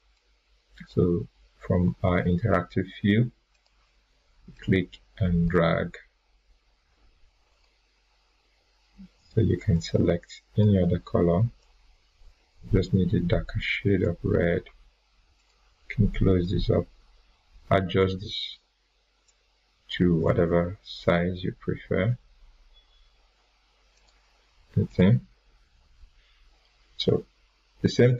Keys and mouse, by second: 0.1-1.0 drag, 23.9 click, 25.9 click.